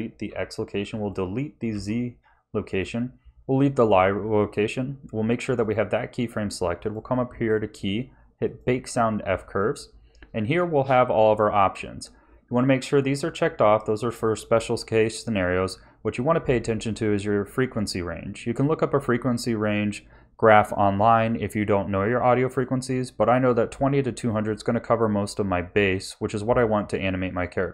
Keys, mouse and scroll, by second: 0.2 Delete, 0.9 click, 1.7 Delete, 2.6 click, 5.3 click, 6.8 click.